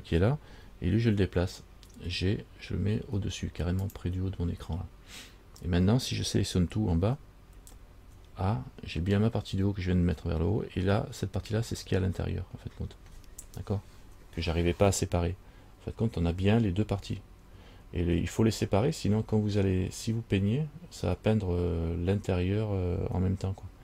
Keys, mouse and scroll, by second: 2.2 g, 7.7 a, 8.3 a.